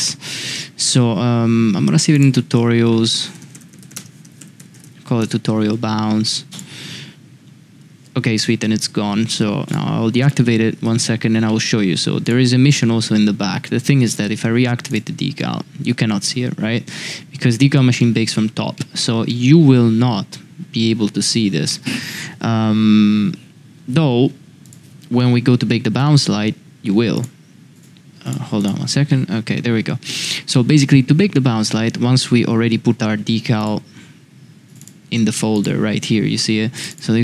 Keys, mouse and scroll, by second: 2.1-5.9 drag, 6.5-6.9 drag, 9.6 click, 10.3-10.9 middle drag, 11.4 shift+middle drag, 12.8-13.1 middle drag, 14.9 click, 15.4-15.8 middle drag, 18.0 middle drag, 18.7 middle drag, 19.3-19.7 middle drag, 24.6 click, 25.2-25.7 middle drag, 26.0-26.3 middle drag, 27.1 click, 27.7 click, 28.2 click, 28.6 click, 29.1 middle click, 30.5-31.2 middle drag, 31.7 shift+middle drag.